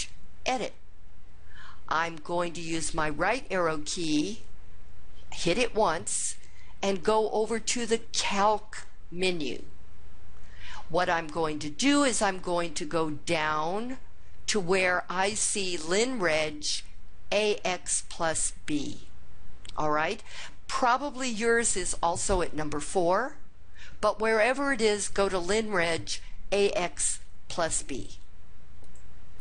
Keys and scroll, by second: 5.2 Right, 28.7 Down, 29.2 Down.